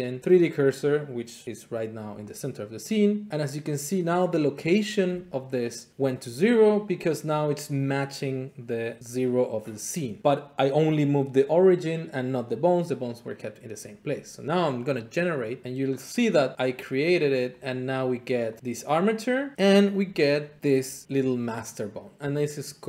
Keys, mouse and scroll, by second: 2.8 click, 10.2 middle click, 13.8-14.9 middle drag, 15.1-16.2 drag, 17.5-18.9 drag, 19.6 click, 21.0 middle click.